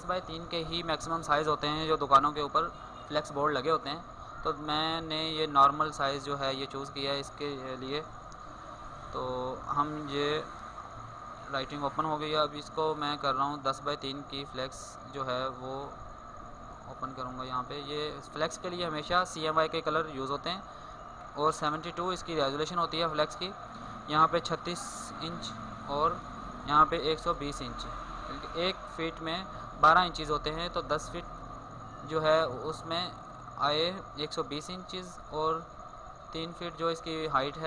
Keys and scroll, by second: 12.0 ctrl+n.